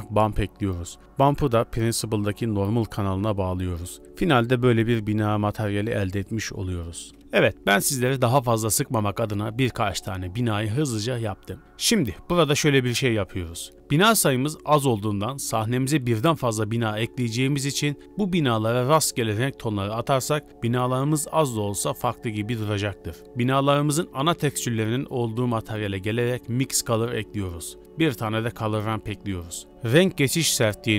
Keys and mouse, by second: 1.0 click, 1.7-2.5 drag, 3.3 click, 7.2 n, 9.4 middle click, 10.5 shift+middle drag, 12.7 click, 14.1 middle click, 15.3-16.4 middle drag, 16.4 middle click, 16.9 middle click, 17.1 middle click, 17.4 middle click, 18.4-18.8 middle drag, 19.3 shift+middle click, 19.7-20.6 middle drag, 20.8-21.2 middle drag, 22.1 KP_Decimal, 23.2 click, 23.2-23.5 middle drag, 24.1 Tab, 25.3 Tab, 26.1 click, 26.4 shift+a, 28.3 click, 28.9 shift+a.